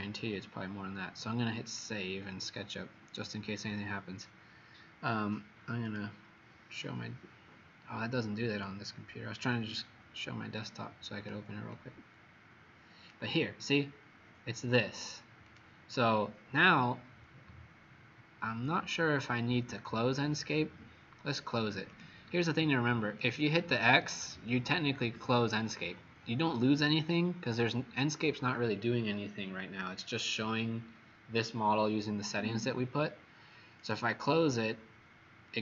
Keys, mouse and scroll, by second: 15.8 click, 22.5 click, 33.8 click.